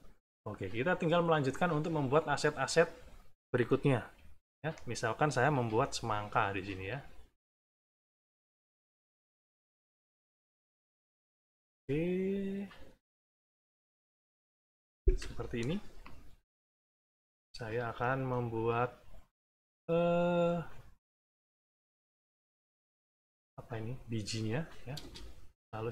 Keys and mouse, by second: 4.0 =, 4.4 middle click, 5.5 b, 7.0 click, 8.2 click, 9.3 click, 10.7 click, 12.7 click, 13.8 click, 15.1 Return, 16.5 =, 17.1 middle click, 18.1 middle click, 18.7 click, 19.3 click, 20.3 click, 21.5 click, 22.4 click, 23.3-25.0 drag, 24.9 space, 25.5-25.9 drag.